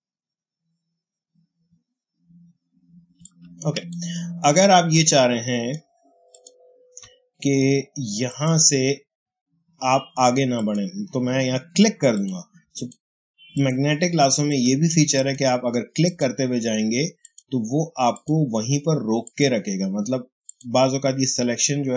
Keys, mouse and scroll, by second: 3.1 space, 3.1 click, 3.6 space, 4.8-6.2 ctrl+drag, 12.3 click.